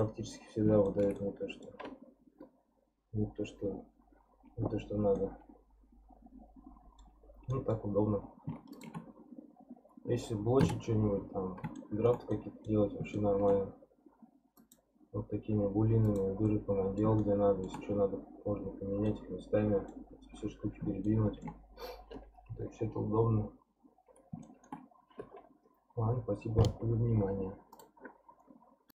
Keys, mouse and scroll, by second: 5.0 scroll up 1, 5.2-7.2 middle drag, 7.2 scroll down 3, 7.5-8.7 middle drag, 8.7 shift+click, 9.1-10.6 scroll up 2, 10.6 Delete, 11.3-11.7 scroll down 1, 11.7-14.6 shift+middle drag, 14.6 click, 16.0 click, 16.4-21.7 middle drag, 21.7-24.4 scroll down 2, 24.4-27.6 shift+middle drag.